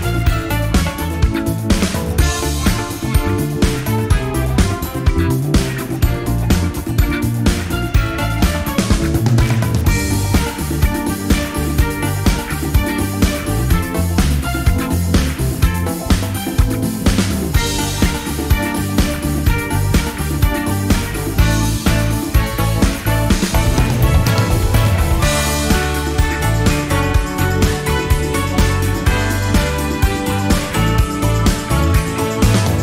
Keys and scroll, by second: 8.4 F1, 9.4 shift+F6, 19.6 F1, 20.0 typing, 21.2 typing, 23.2 space, 23.8 shift+F6, 26.0 F1, 29.2-30.1 typing, 32.5 shift+F6.